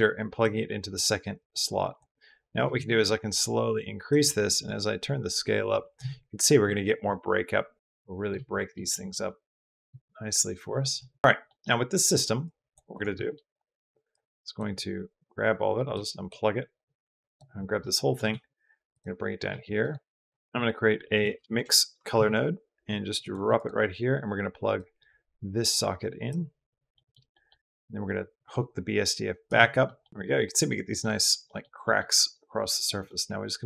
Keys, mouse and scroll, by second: 1.2 click, 2.4-3.9 shift+drag, 4.5-5.8 middle drag, 8.5 middle click, 8.7 middle click, 9.7-10.8 middle drag, 11.3 middle click, 12.2 click, 12.7 click, 13.1 click, 13.9-14.4 drag, 15.7-16.1 drag, 16.5 click, 17.6 middle click, 18.1 g, 19.3 g, 20.4 b, 20.4 g, 20.4 shift+a, 24.6 click, 24.8-26.1 drag, 26.8 middle click, 28.2-29.3 drag, 29.7 middle click, 30.9 middle drag, 31.3 middle drag, 31.6 middle drag, 32.9-33.6 middle drag.